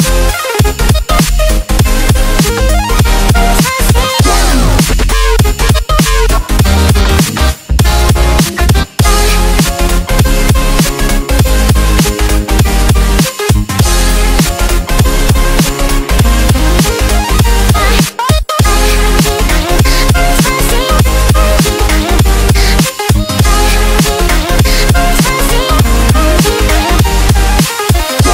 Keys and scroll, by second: 4.6 g, 7.6-9.9 typing, 9.0 alt+super+space, 9.0 alt+super+space, 9.1 alt+super+space, 9.2 alt+super+space, 12.3 super+g, 12.8-14.3 typing, 13.3 alt+super+space, 13.4 alt+super+space, 13.5 alt+super+space, 13.6 alt+super+space, 18.8-20.2 typing, 19.5 Tab, 20.7-21.6 super+space, 22.1 super+space, 22.4 super+space, 24.3 space, 24.7 space, 24.8 space.